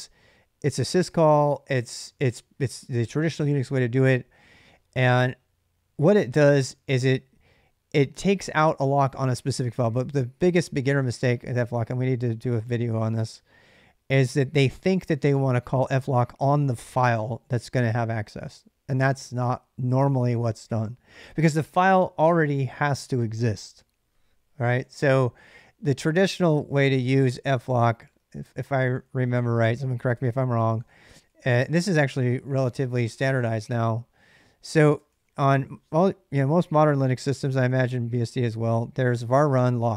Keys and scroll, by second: 27.6 ctrl+c, 28.8-32.9 typing, 33.2 Return, 34.6-36.3 typing, 37.2 Tab, 37.5 Tab, 38.0-39.5 typing, 39.6 Tab.